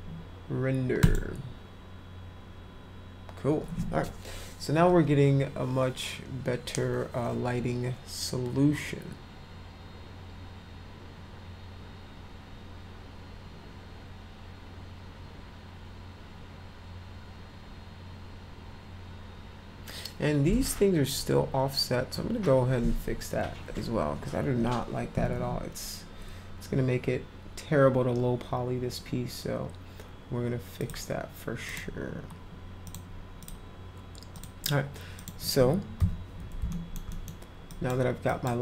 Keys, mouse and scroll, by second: 1.0 click, 30.8 click, 31.6 click, 34.3 click, 35.2 click, 36.7 alt+middle click, 37.1 middle click, 37.6 drag, 38.3 drag.